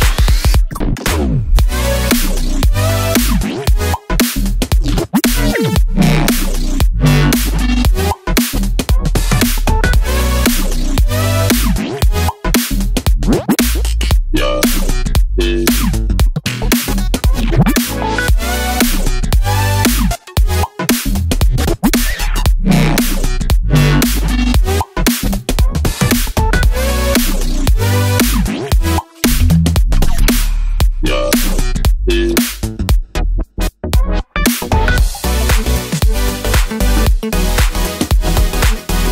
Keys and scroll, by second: 37.9 super+d.